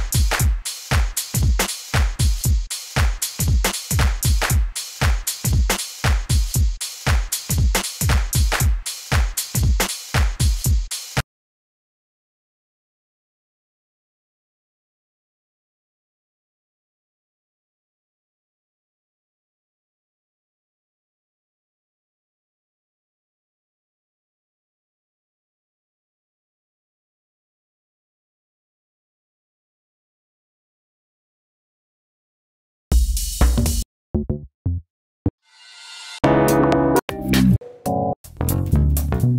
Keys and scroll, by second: 4.8 super+r, 5.2-6.6 typing, 6.8 Return, 8.9 super+r, 9.2-11.2 typing, 10.4 Return.